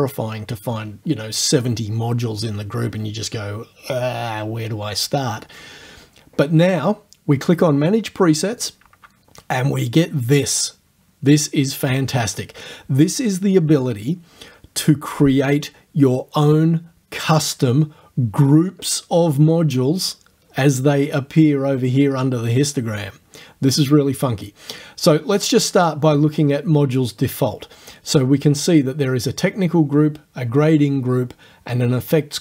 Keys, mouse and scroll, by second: 8.6 click, 25.8 click.